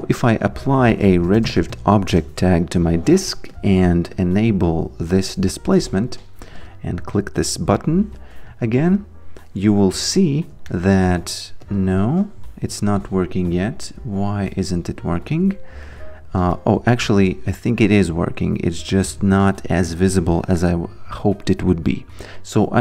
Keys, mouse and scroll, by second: 0.0 click, 0.7-2.2 typing, 2.4 Return, 3.5 click, 8.6 alt+right click, 9.0 alt+click, 10.7 alt+middle click, 11.6 click, 12.0 q, 13.8 click, 16.6 alt+click, 17.6 alt+right click, 19.9 click.